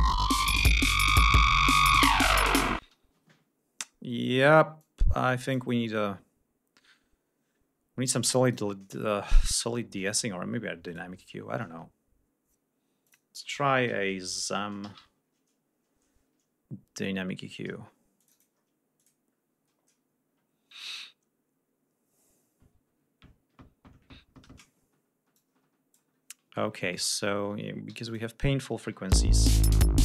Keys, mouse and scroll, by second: 2.5 space, 3.6 scroll up 2, 4.5 click, 5.5-6.1 scroll up 4, 8.1 click, 8.8 scroll up 2, 10.5 right click, 12.7 click, 13.5-15.1 typing, 17.8 click, 18.6 click, 25.0 click, 26.1 ctrl+scroll down 2, 26.9 scroll down 2, 27.5 g, 27.7 click, 28.7 l, 29.4 ctrl+scroll down 2, 29.8 ctrl+scroll up 2.